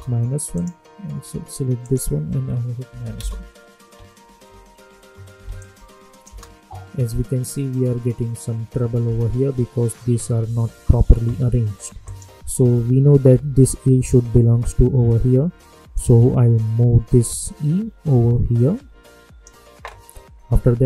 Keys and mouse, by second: 0.5 click, 2.8 -, 3.1 Return, 5.5 click, 6.2 space, 9.0 space, 12.0 click, 13.2 v, 15.9-19.0 drag, 19.0 shift+Num_Lock.